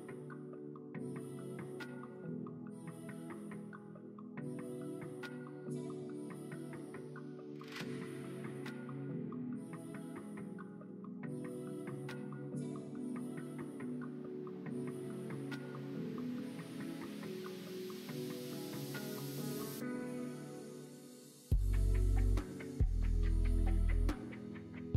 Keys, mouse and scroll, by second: 9.7 middle click, 10.4 middle click, 12.6 alt+click, 13.3 middle click, 13.6 middle click.